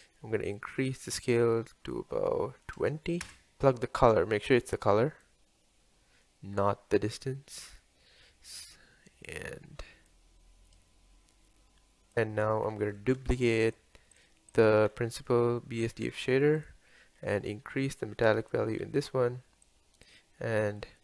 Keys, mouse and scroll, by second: 1.5-2.2 scroll up 1, 2.2-3.6 drag, 3.6-4.1 scroll down 4, 4.1 click, 7.3-7.8 scroll up 4, 7.8 scroll down 1, 9.3 click, 10.8 click, 12.1 scroll down 3, 14.5 drag, 16.1 shift+d, 18.2-19.8 drag.